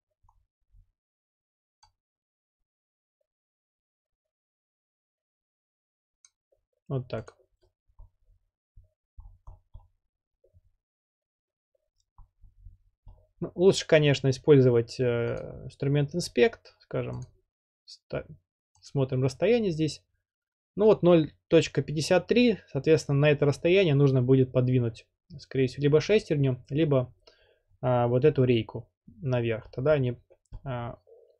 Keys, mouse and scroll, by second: 0.4-0.9 scroll, 6.2 click, 8.0-8.5 scroll up 7, 8.8 scroll up 4, 9.2 scroll, 9.3-9.6 scroll down 6, 9.7 scroll, 12.2-12.9 scroll up 12, 13.1-13.6 scroll, 15.9-16.5 drag, 17.2 click, 18.9 click, 29.7-30.0 scroll down 2, 30.0 scroll, 30.5 scroll down 8, 30.6-31.3 middle drag, 30.6-31.0 scroll.